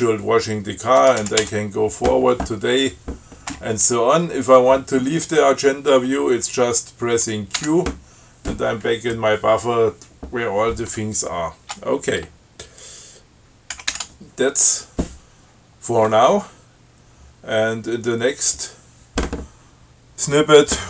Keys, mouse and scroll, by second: 1.2 f, 7.8 q, 9.0-9.6 scroll up 4, 14.0 ctrl+x, 14.1 ctrl+s.